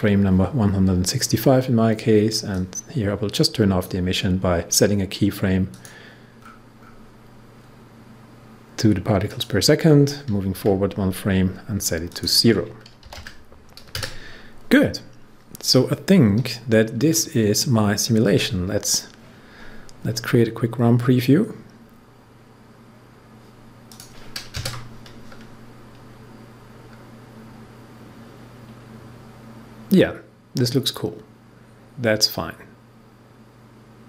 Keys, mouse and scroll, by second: 2.4-5.7 drag, 6.3 scroll down 1, 9.2 click, 10.5 Page_Down, 12.0 click, 13.0 0, 23.8 click.